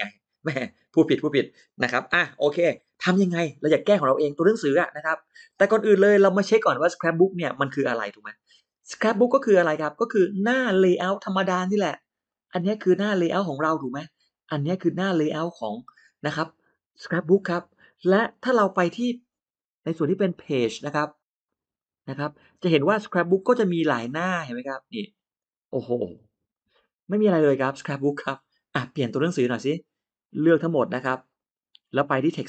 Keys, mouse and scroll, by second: 12.1 click, 14.4 click, 20.5 click, 21.6 click, 22.8 middle click, 23.8 click, 24.4 click, 25.2 click, 26.0 click, 26.4 click, 28.7 middle click, 28.7-29.0 scroll up 1, 29.4 middle click, 29.4 scroll down 1, 30.1-31.6 drag.